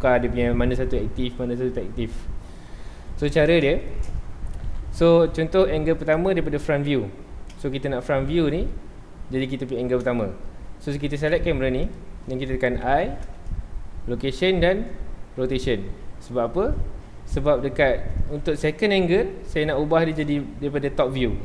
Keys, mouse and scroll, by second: 3.4-3.8 scroll up 2, 3.8-4.7 shift+middle drag, 4.7 KP_7, 6.1 KP_7, 6.3-7.6 scroll up 2, 7.6-11.1 shift+middle drag, 11.1 click, 11.8 click, 12.8 i, 15.7 i, 18.0-21.4 middle drag.